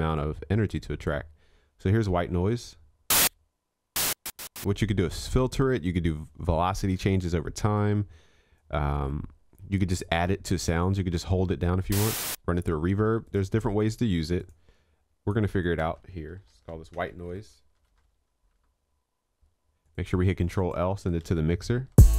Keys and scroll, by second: 21.4 ctrl+l.